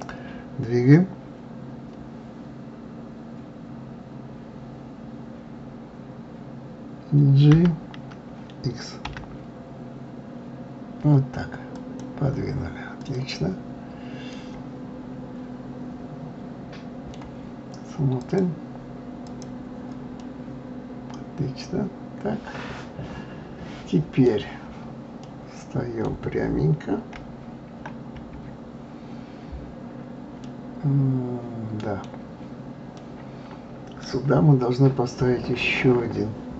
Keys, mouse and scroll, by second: 13.0 click, 14.0 scroll up 1, 14.3-17.3 middle drag, 18.2 click, 19.3 click, 20.2-23.2 middle drag, 25.2-27.1 middle drag, 27.1 KP_1, 29.4 scroll up 2, 30.4-35.9 middle drag.